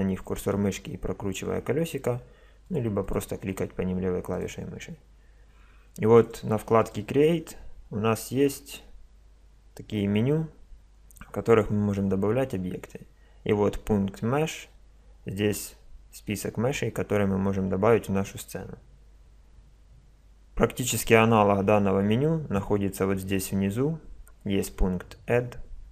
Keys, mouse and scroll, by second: 1.0-2.7 middle drag, 2.7-6.1 drag, 6.2-8.7 drag, 9.7-11.9 middle drag, 12.1-14.1 middle drag.